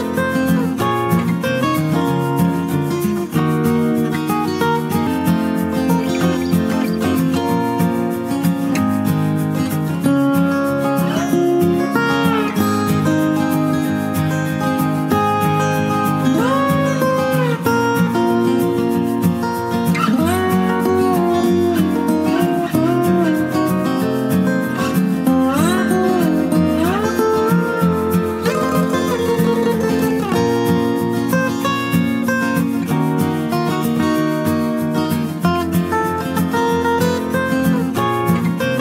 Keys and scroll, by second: 5.5 p, 8.4-9.3 typing, 14.0 ctrl+alt+z, 14.3 ctrl+alt+z, 19.1 ctrl+z, 22.3 ctrl+space, 22.8 ctrl+space, 23.0 ctrl+space, 23.1 ctrl+space, 23.5 ], 38.2 ctrl+t.